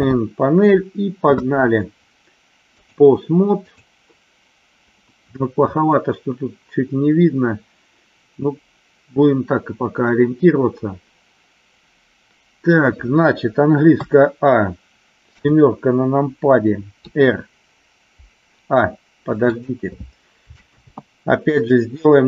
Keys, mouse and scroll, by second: 2.7-3.8 drag, 13.9 a, 17.0 r, 19.4 click, 20.8 ctrl+z.